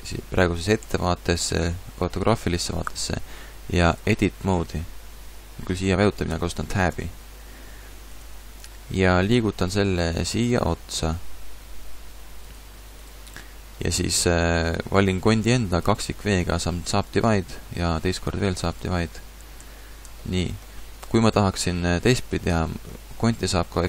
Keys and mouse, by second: 0.8 KP_5, 6.9 Tab, 8.1-10.1 drag, 9.2 g, 12.6 click, 15.9 w, 18.0 w, 19.6 a.